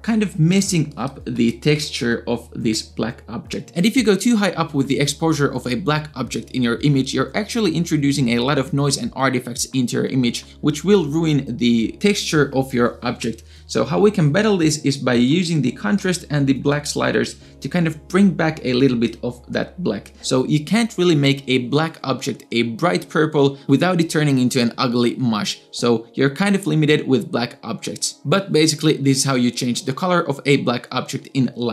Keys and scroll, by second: 0.2 space, 0.7 space, 0.9 space.